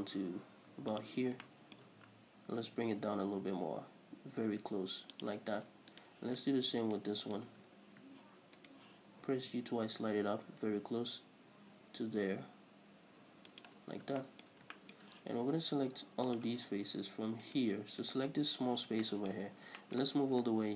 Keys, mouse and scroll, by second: 1.3 click, 1.7-5.5 shift+middle drag, 2.8 g, 5.5 click, 6.2 right click, 7.0 ctrl+right click, 7.8 ctrl+z, 8.8 ctrl+right click, 9.4 g, 13.8 shift+click, 14.2 scroll up 2, 14.4-16.5 shift+middle drag, 14.8 scroll down 2, 16.5 click, 17.7 right click, 18.3 right click, 19.2-20.7 shift+middle drag, 19.6-20.0 scroll up 2.